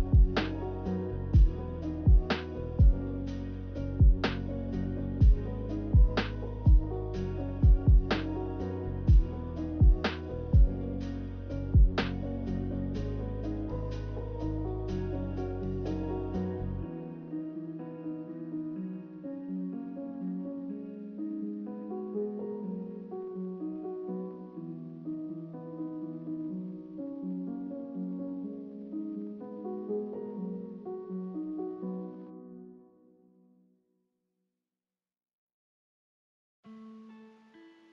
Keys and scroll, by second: 0.0 b, 3.2 z, 8.8 b, 14.9 b, 27.3-28.1 typing.